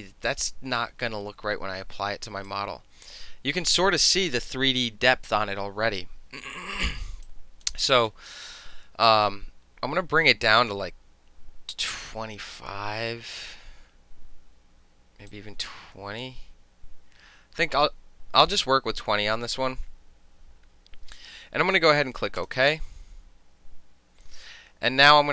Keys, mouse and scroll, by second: 2.6-3.9 drag, 7.3-7.7 drag, 7.7-9.1 middle drag, 9.1-10.8 drag, 10.8-14.6 middle drag, 15.4 click, 22.5 click.